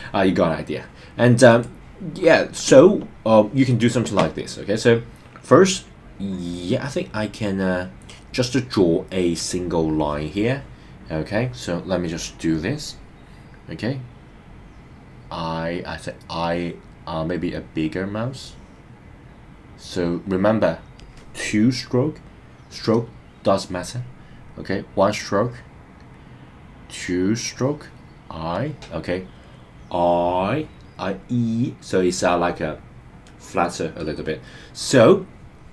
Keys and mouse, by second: 12.4 click, 17.7-21.0 drag, 26.6-28.5 drag.